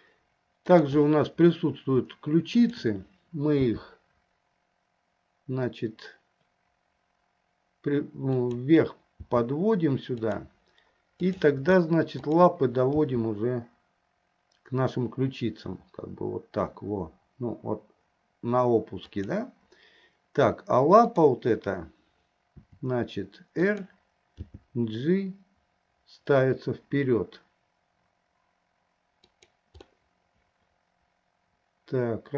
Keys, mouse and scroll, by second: 0.7 click, 2.8 shift+click, 3.9 g, 9.5 g, 11.5 click, 12.5 click, 13.3 g, 22.8 r, 24.8 g, 30.1-32.3 middle drag.